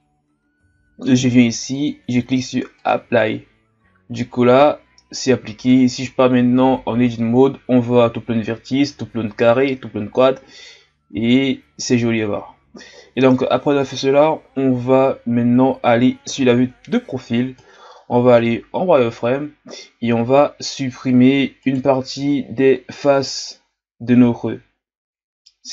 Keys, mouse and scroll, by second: 0.5-1.7 ctrl+scroll down 2, 1.7-4.8 drag, 5.5 Tab, 16.3 KP_3, 18.4 z, 21.6 right click, 22.1 b.